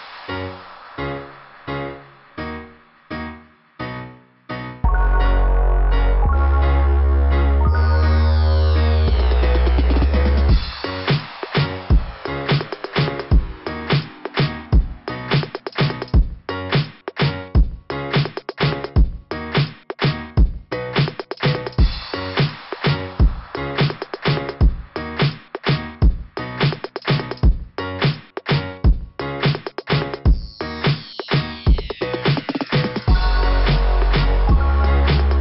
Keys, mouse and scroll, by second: 1.3 click, 1.5 click, 2.4 click, 5.9 click, 6.0 click, 7.6 click, 7.8 click, 8.5 click, 8.7 click, 10.4 click, 10.5 click, 12.0 click, 18.7 right click, 18.8 right click, 19.0 right click, 19.2 right click, 19.3 right click, 21.7 click, 22.0 click, 23.0 click, 23.2 click, 23.6 click, 25.9 click, 27.5 click, 27.7 click, 27.7 click, 27.8 click, 30.3 click, 31.4 click, 33.8 right click, 34.0 right click, 34.9 click, 35.1 click, 35.2 click.